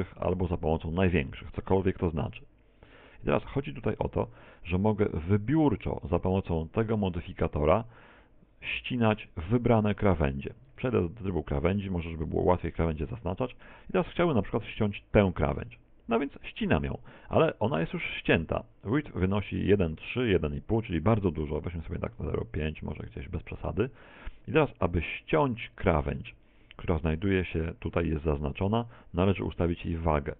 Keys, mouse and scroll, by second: 9.9 right click, 11.3 shift+right click, 14.5 ctrl+Tab, 15.9 right click, 16.6 right click, 22.5 click.